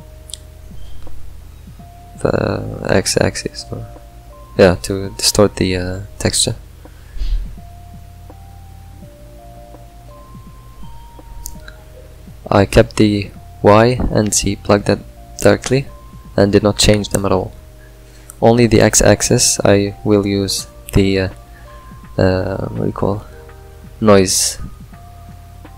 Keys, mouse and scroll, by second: 3.5 click, 5.7 click, 6.3 click, 7.2 click, 10.4 click, 14.4 click, 15.7 click, 17.9 middle click, 18.0 scroll up 2.